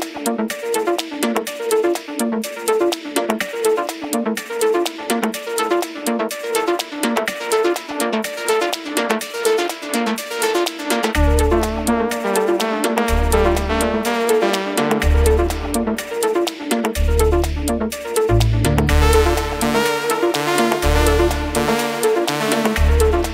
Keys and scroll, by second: 0.0-4.8 typing, 3.3 Right, 3.6 Right.